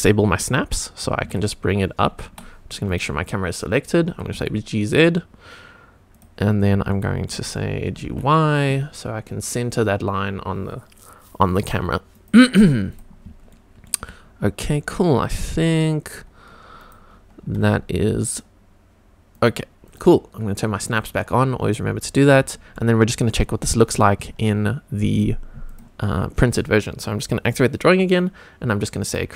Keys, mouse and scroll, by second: 1.0 g, 1.2 z, 2.8 click, 4.0 g, 4.3 z, 5.1 click, 5.5 click, 6.1 click, 6.5-6.9 scroll up 2, 6.9 shift+middle click, 7.9 g, 8.0 y, 12.1 click, 12.9 click, 13.5-13.8 shift+middle drag, 14.4-15.4 scroll up 1, 15.4 g, 15.5 y, 16.8 click, 17.4 g, 17.6 y, 19.3 click, 19.8 click, 20.8 click, 21.6 click, 22.1-22.5 scroll up 2, 22.5 shift+middle drag, 23.8 click, 25.6 click, 29.0 click.